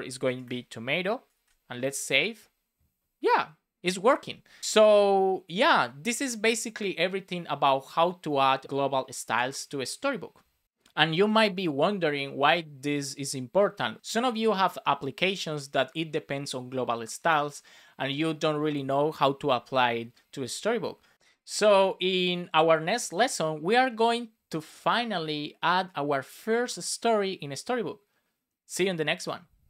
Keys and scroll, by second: 1.2 super+s.